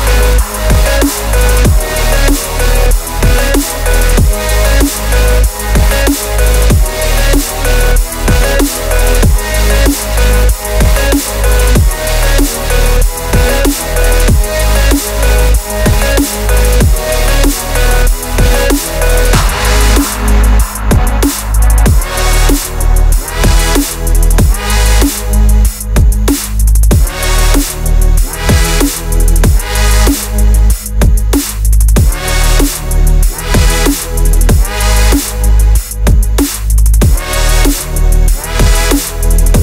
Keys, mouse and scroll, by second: 1.1 click, 2.0 scroll up 1, 2.2-4.9 typing, 4.2 Tab, 4.4 click, 4.6 Tab, 5.9 Tab, 6.1 a, 6.2 s, 6.8 shift+z, 7.2 click, 7.5 click, 8.0 shift+z, 8.1 click, 8.6 s, 9.3-10.0 right drag, 10.0 s, 10.5 Tab, 10.9 ctrl+r, 12.0 Tab, 12.2 s, 13.8 shift+click, 14.0 s, 14.5 s, 15.3 shift+middle click, 15.5 click, 15.7 Tab, 16.0 3, 16.1 click, 16.5 click, 17.2 shift+z, 17.5 click, 17.8 click, 18.0 click, 18.5 click, 18.9 shift+z, 19.1 Tab, 19.7 s, 20.2-20.7 scroll up 1, 20.7 click, 21.1 scroll down 2, 21.3-21.8 shift+middle drag, 21.8 Tab, 22.2 3, 22.6 click, 23.2 ctrl+click, 25.1 ctrl+click, 25.4 ctrl+click, 25.8 click, 26.4 ctrl+click, 26.9 shift+d, 27.2 p, 27.6 Tab, 27.7 click, 27.9 Tab, 28.4 ctrl+r, 29.9 3, 30.1 drag, 30.5 click, 30.8 ctrl+click, 31.1 shift+click, 31.5 ctrl+click, 31.9 Delete, 32.4 Tab, 32.8 Tab, 33.1 a, 33.5 e, 34.3 Tab, 34.6-35.2 right drag, 35.2 click, 35.8 click, 36.3-36.9 right drag, 36.9 click, 37.1 scroll down 2, 37.4 drag, 37.7 scroll up 2, 37.9 s, 38.8 scroll down 1, 39.0 shift+click, 39.2 shift+click, 39.4-39.6 scroll down 1.